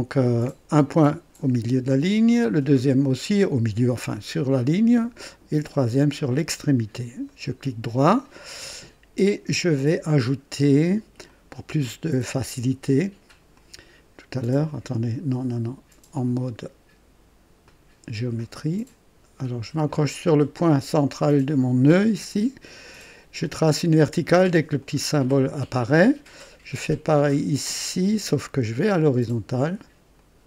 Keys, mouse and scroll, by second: 3.3 click, 6.2 click, 7.2 right click, 11.2 click, 13.5 click, 16.1 click, 17.6 click, 20.9 click, 24.7 click, 28.2 click, 30.1 click.